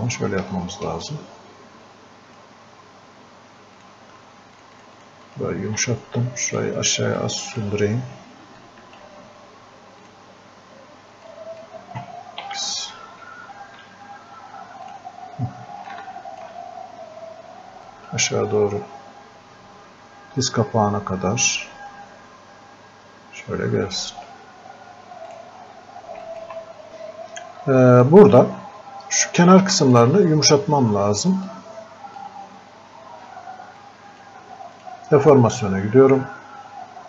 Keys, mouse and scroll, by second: 0.5 ctrl+Num_Lock, 0.9-8.7 ctrl+drag, 7.6 click, 9.0 alt+click, 11.6 shift+click, 12.5 x, 14.9 click, 15.9-17.9 alt+drag, 17.9-28.3 drag, 28.3-28.6 scroll up 1, 28.9-29.4 scroll down 1, 29.9 alt+click, 31.8-33.8 drag.